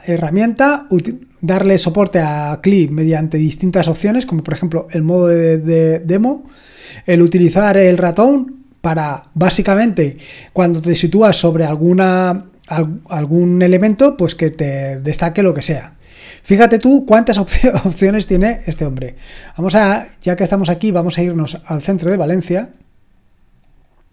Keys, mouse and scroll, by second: 5.1-6.6 scroll down 2, 6.6-8.5 scroll down 1, 12.2 click, 18.4-21.2 scroll down 2, 21.2-23.7 drag, 23.7 scroll up 2, 23.8 click.